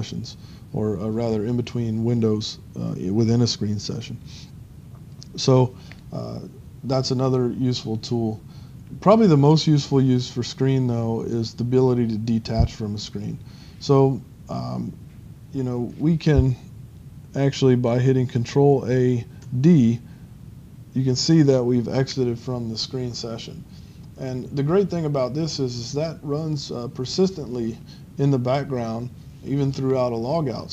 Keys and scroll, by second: 19.5 ctrl+d, 20.8 ctrl+d.